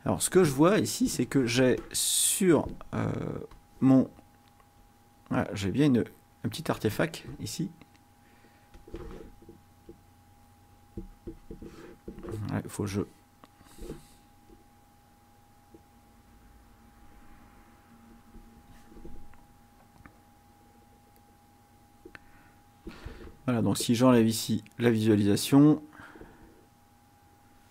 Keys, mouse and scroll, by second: 4.8-6.4 drag, 8.8 click, 9.9-11.7 drag, 12.8-14.1 drag, 14.4-17.6 drag, 18.2 click, 19.8-22.4 drag, 24.2 click.